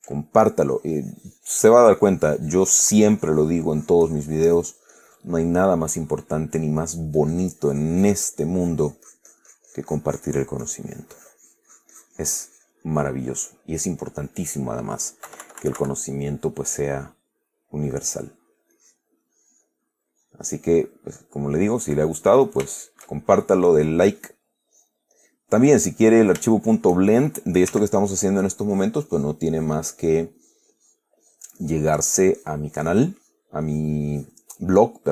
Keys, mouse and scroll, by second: 0.0 ctrl+click, 0.5-0.9 ctrl+middle drag, 1.2-5.7 drag, 5.7-6.2 middle drag, 6.3-7.3 middle drag, 7.5-14.1 drag, 14.3-15.2 middle drag, 15.6 KP_Subtract, 16.3-18.7 drag, 19.1 click, 19.6 click, 20.6 click, 21.5-22.3 middle drag, 22.5-23.5 middle drag, 24.2 click, 25.0 click, 25.5 click, 26.0 click, 26.8 shift+click, 28.0 f, 28.4 click, 29.0 click, 29.9 click, 30.3 click, 31.2-33.9 drag, 34.0 click, 34.4 click.